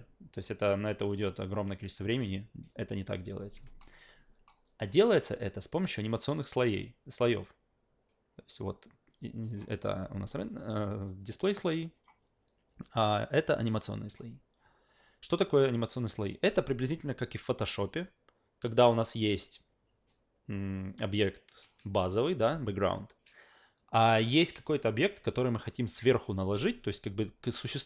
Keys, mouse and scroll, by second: 0.4 click, 3.7 alt+middle click, 4.2-4.9 alt+right drag, 8.5 click, 9.4 click, 11.9 click.